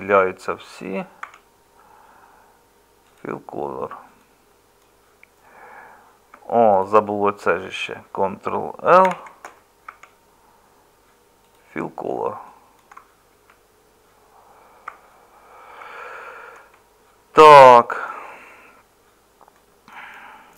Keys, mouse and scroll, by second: 1.2 Tab, 6.3 Tab, 9.1 ctrl+l, 9.9 Tab, 13.3 Tab, 14.9 Tab.